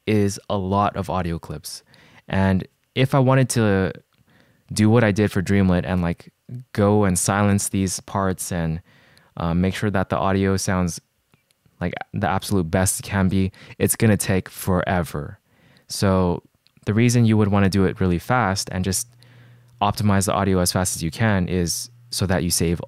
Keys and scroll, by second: 7.2 s.